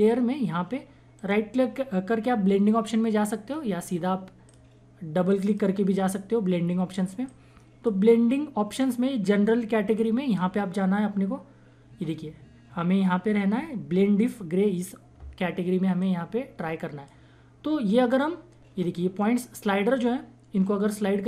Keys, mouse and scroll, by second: 1.2 right click, 6.4-9.9 drag, 9.9-13.0 drag, 16.0-19.6 drag, 20.0-21.2 drag.